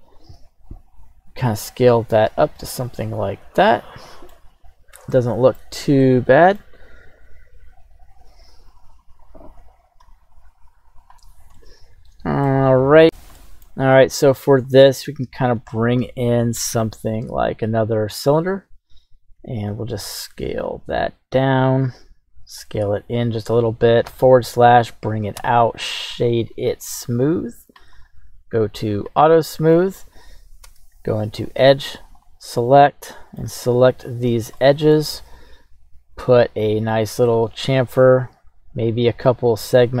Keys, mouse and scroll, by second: 0.4 s, 1.9 drag, 2.5-4.3 middle drag, 2.5-3.4 scroll down 1, 4.5-4.9 scroll up 2, 5.1-5.5 shift+middle drag, 5.8 scroll up 1, 6.0 middle click, 7.1 right click, 9.6 ctrl+z, 10.0 ctrl+z, 11.5 middle click, 13.4-13.7 middle drag, 14.6 click, 15.5 shift+a, 19.3 s, 20.1 z, 21.6 click, 22.0 s, 23.2-24.1 drag, 24.1 /, 25.3 q, 27.7 click, 27.9 click, 29.0 click, 29.5 scroll down 1, 29.7-30.1 middle drag, 30.6 Tab, 31.4 right click, 32.0 alt+shift+right click, 32.6 middle click, 33.8 alt+shift+right click, 34.6 middle click, 34.6-34.9 scroll down 1, 35.3 ctrl+b, 36.1-36.8 scroll down 1, 36.8-37.5 scroll down 3, 38.3-39.5 scroll up 2, 39.8-40.0 scroll down 3.